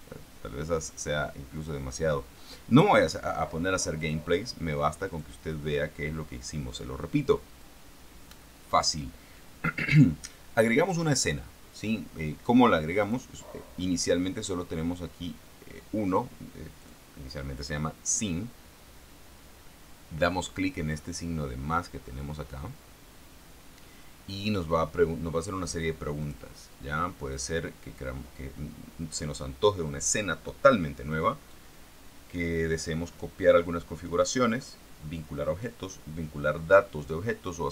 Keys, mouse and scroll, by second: 0.6 Return, 4.3 click, 5.4 click, 8.0-9.4 drag, 13.3 click, 17.1 click, 26.5 click.